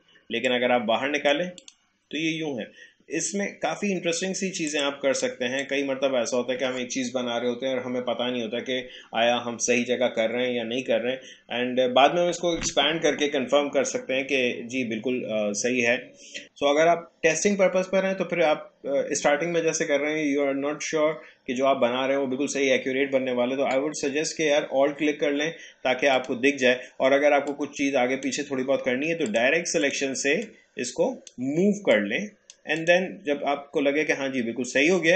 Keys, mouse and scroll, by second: 4.7-8.2 drag, 26.1-32.8 drag.